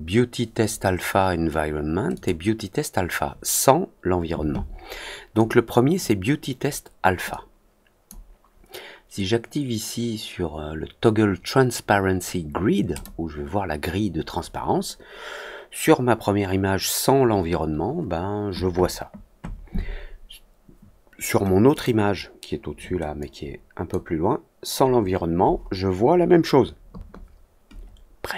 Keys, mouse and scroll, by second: 2.1 click, 5.3 click, 7.2 click, 12.9 click, 21.6 click, 23.1-23.8 drag.